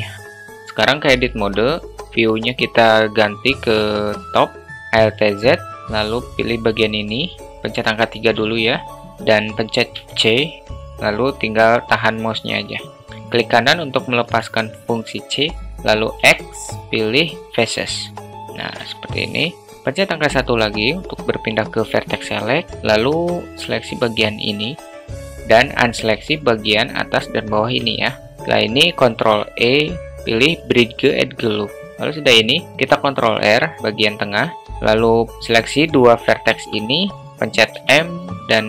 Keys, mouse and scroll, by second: 0.0 click, 0.5 alt+shift+Tab, 0.7 shift+middle drag, 1.9 Tab, 2.1 `, 4.5 shift+middle click, 5.5 alt+z, 8.9 3, 10.6 c, 17.0 x, 19.6 middle click, 21.6 1, 23.5-25.2 drag, 26.7 ctrl+click, 27.7 ctrl+click, 29.7 ctrl+e, 30.0 ctrl+e, 33.7 ctrl+r, 35.3-36.5 drag, 36.9 alt+shift+middle click, 38.5 m.